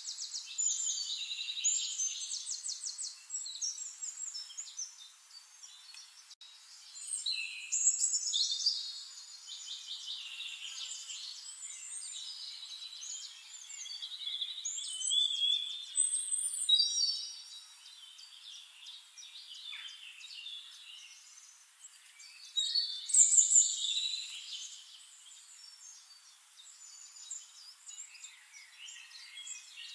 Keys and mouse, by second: 2.2-9.0 drag, 3.1-5.9 shift+right drag, 9.5 ctrl+g, 10.0-16.7 drag, 11.5-16.7 middle drag, 11.5-13.9 right drag, 16.4 right click, 16.7-18.0 middle drag, 16.9 click, 17.0 click, 22.2-23.2 right drag, 24.9-27.6 drag, 27.7 click, 29.2-29.9 drag.